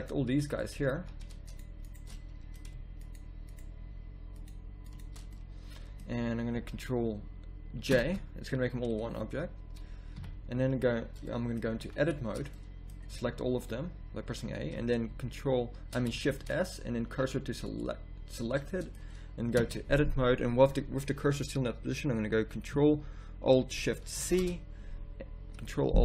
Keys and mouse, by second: 0.9 z, 7.9 ctrl+j, 10.1 KP_3, 11.7 z, 12.1 Tab, 13.1 a, 13.3 a, 16.2 shift+s, 19.6 Tab, 24.2 ctrl+alt+shift+c.